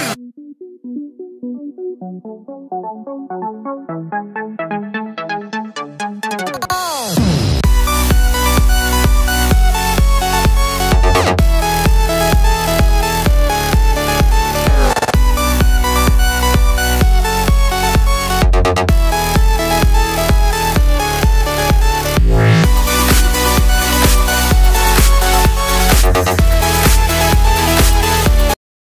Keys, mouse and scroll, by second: 3.8 click, 7.9 click, 8.5 click, 16.5-19.7 drag.